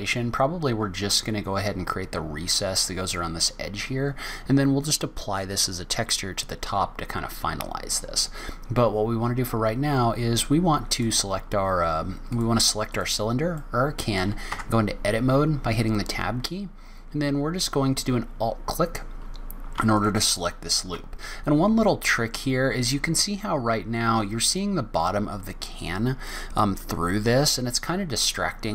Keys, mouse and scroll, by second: 7.4-7.9 scroll down 2, 8.0 scroll up 1, 8.9 scroll down 1, 10.9 click, 12.3 click, 13.6 middle click, 14.5 Tab, 15.1 scroll up 1, 15.9-16.3 scroll, 16.4 scroll down 1, 16.4 scroll down 2, 16.8-17.5 scroll up 1, 18.0 scroll down 1, 21.9-22.2 scroll down 1, 27.4 middle click.